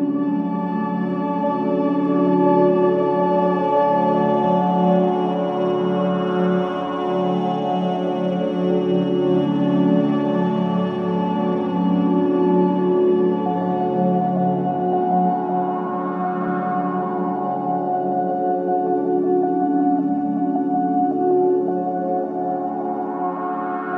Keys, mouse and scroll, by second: 1.2 click, 6.6 click, 11.0 click, 13.3 right click, 14.1 click, 17.3 right click, 18.6-21.2 drag, 20.5-21.4 typing, 22.7 click.